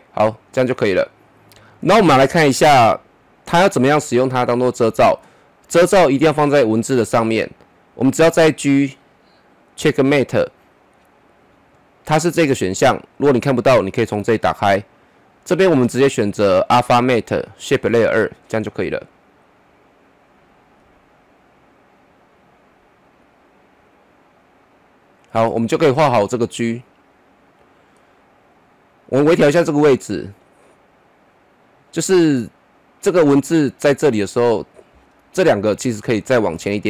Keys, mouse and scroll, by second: 1.6 scroll up 1, 2.5 click, 8.1 click, 12.8 click, 17.9-29.8 drag, 35.2 shift+click.